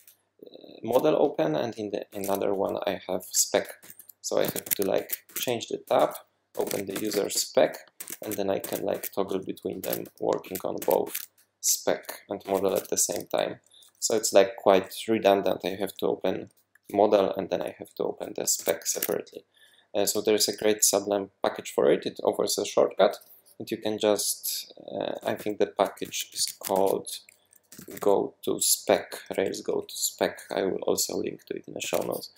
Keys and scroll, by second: 2.1 super+2, 3.8 super+p, 4.4 Escape, 4.6 Escape, 5.0 super+1, 5.3 super+2, 6.0 super+p, 6.3-7.6 typing, 8.0 super+1, 8.2 super+2, 8.6 super+1, 8.9 super+2, 9.8 super+1, 10.4 super+2, 10.8 super+1, 11.0 super+2, 12.5 super+1, 12.7 super+2, 18.6 super+w, 18.9 super+1, 25.4 super+p, 26.4 Escape, 26.7 shift+super+p, 27.4-28.5 typing, 31.8 Escape.